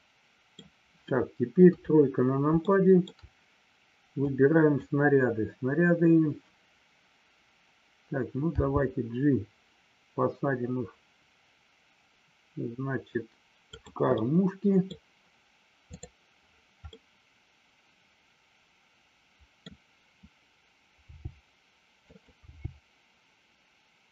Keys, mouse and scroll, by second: 1.7 KP_3, 2.7 shift+scroll up 1, 2.8 shift+middle click, 2.9 shift+scroll down 1, 4.3 click, 13.7 click, 14.1 scroll up 1, 14.2 middle click, 16.8-19.7 middle drag, 22.1 click.